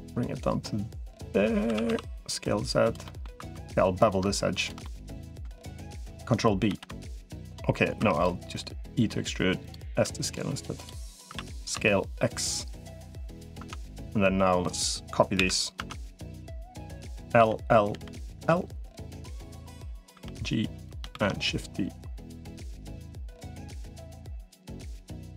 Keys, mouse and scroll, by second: 1.5 s, 2.8 middle click, 3.3 2, 4.6 middle click, 6.5 ctrl+b, 7.9 click, 7.9 3, 8.3 e, 9.7 s, 10.8 middle click, 11.1 s, 13.0 middle click, 13.5 Tab, 15.3 KP_7, 15.7 Tab, 17.3 l, 17.7 l, 18.3 l, 19.1 click, 19.9 g, 20.9 shift+d, 23.1 r, 23.7 g.